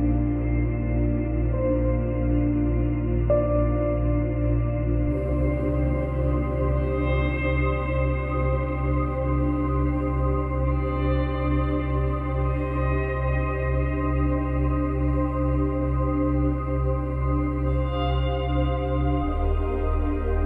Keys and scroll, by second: 0.4 space, 1.1 F9, 16.3 ctrl+z.